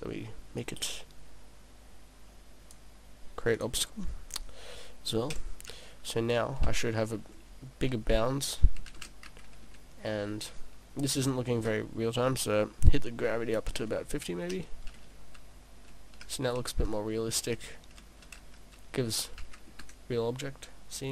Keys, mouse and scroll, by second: 0.6 click, 3.5 click, 5.3 p, 11.2 click, 12.5 click.